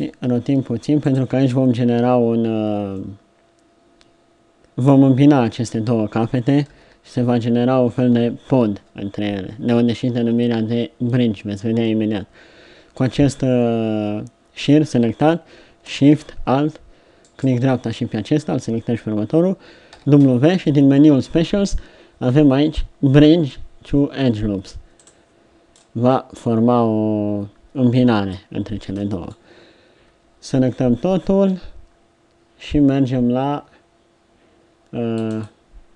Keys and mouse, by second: 0.5 r, 6.7 KP_1, 7.2 KP_3, 8.4 ctrl+KP_3, 19.9 w, 25.7 middle click, 26.5 middle click, 29.9 a, 30.2 a.